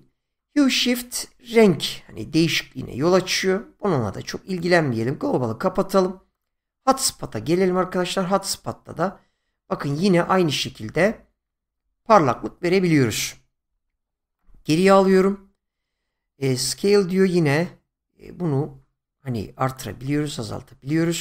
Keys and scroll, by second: 13.7 ctrl+z, 20.0 ctrl+z.